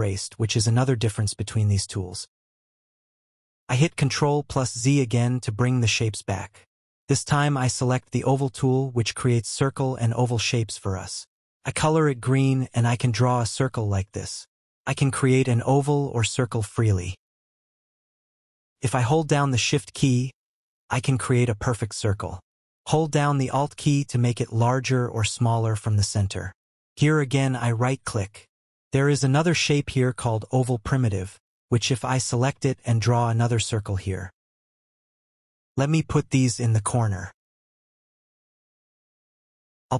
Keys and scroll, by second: 3.4 ctrl+z.